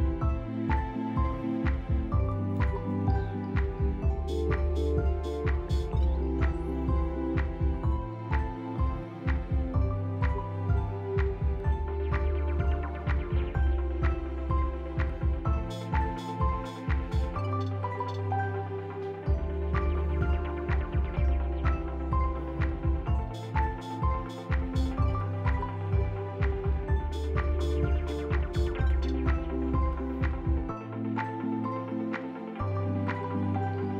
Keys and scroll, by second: 0.1 r, 0.2 ctrl+z, 0.8 r, 1.9 b, 3.2 z, 6.7 f, 9.8 ctrl+z, 13.0 s, 13.3 b, 15.5 z, 19.6 p, 20.4 f, 23.4 F3, 24.1 p, 25.3 p, 26.9 ctrl+c, 26.9 ctrl+v, 28.8 F4, 29.3 s, 31.7 s, 33.0 a.